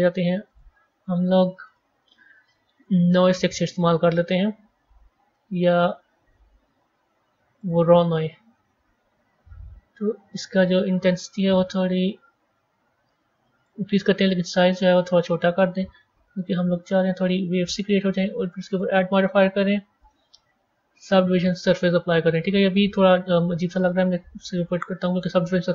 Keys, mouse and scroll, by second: 1.6-4.5 drag, 4.5-4.9 scroll down 4, 5.6-8.6 drag, 8.6-10.6 scroll down 3, 10.6-13.7 drag, 14.2-17.2 drag, 18.6 click, 19.9-22.3 drag, 22.3-22.7 scroll down 2, 22.7-25.7 middle drag.